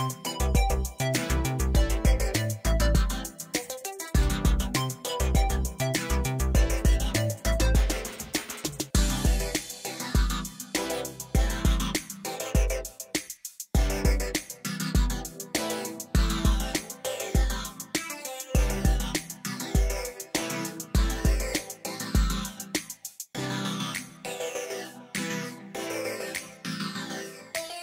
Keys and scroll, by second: 0.0 7, 0.1 Return, 2.2 s, 7.1 Tab, 7.9 shift+d, 8.5 Escape, 9.1 Tab, 10.9 s, 12.4 Escape, 12.8 o, 13.1 s, 15.2 shift+z, 16.3 shift+z, 17.3 x, 26.4 Tab.